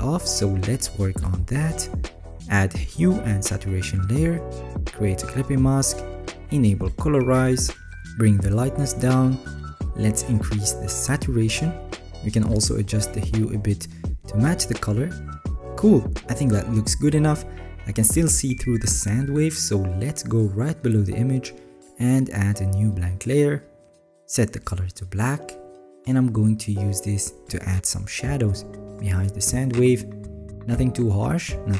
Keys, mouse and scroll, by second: 26.7 alt+right click, 26.7-27.2 alt+scroll up 8, 27.2 alt+scroll, 27.8 alt+right click, 30.5-31.7 alt+right drag.